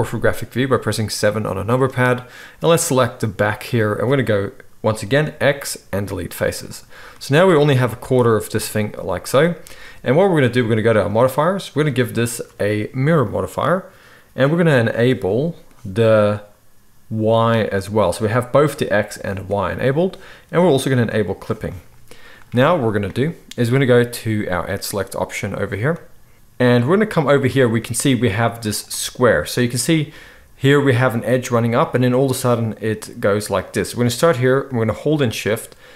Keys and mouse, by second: 0.2-2.1 middle drag, 5.3 x, 7.4 a, 7.9 z, 10.9 middle click, 11.2-11.8 right drag, 11.8-17.5 middle drag, 17.5-21.1 right drag, 21.1 middle click, 21.2-24.7 right drag, 24.7-33.7 middle drag, 33.7-35.9 right drag.